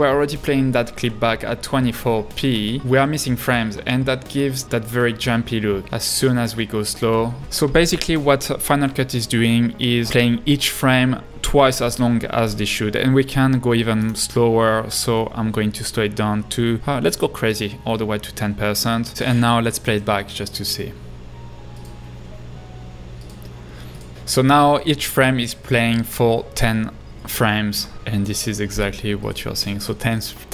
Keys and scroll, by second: 2.6 space, 2.8 space, 4.8 space, 5.6 space, 20.3 space.